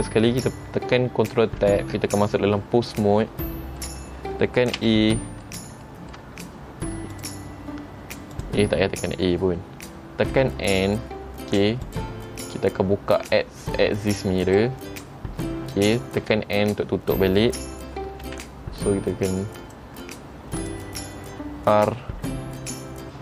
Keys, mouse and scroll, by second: 3.6 middle click, 5.0 a, 5.3 middle click, 6.0 shift+middle click, 7.3 click, 8.5 click, 9.0-10.0 scroll down 2, 10.5 n, 12.0 click, 14.6 click, 16.4 n, 18.4 g, 20.7 click, 21.9 r.